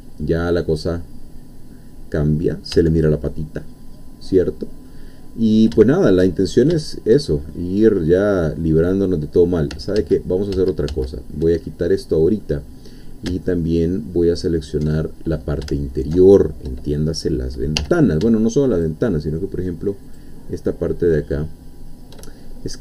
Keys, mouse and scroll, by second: 2.7 Tab, 3.0-5.0 middle drag, 5.3 scroll up 2, 5.7 shift+middle click, 6.4 shift+scroll up 2, 6.8 shift+middle click, 7.5-10.0 shift+middle drag, 10.0 ctrl+z, 11.7 ctrl+middle click, 15.0 alt+shift+middle click, 17.0 shift+scroll up 2, 17.8 2, 18.7 shift+click, 20.2-22.1 shift+drag, 22.4-22.8 shift+scroll down 2.